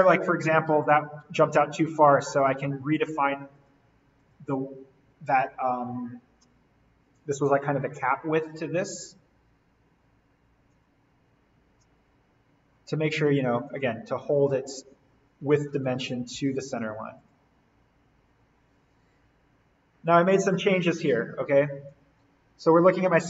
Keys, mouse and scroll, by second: 0.6-1.2 scroll up 1, 1.2 d, 2.2 click, 9.0 click, 10.7 Escape, 11.1-11.5 scroll down 1, 11.5 scroll up 1, 13.4 click, 15.4-16.6 typing, 17.2 click, 18.6 scroll down 1, 19.2 Escape, 19.6-20.4 scroll up 1, 20.4-22.1 scroll up 1.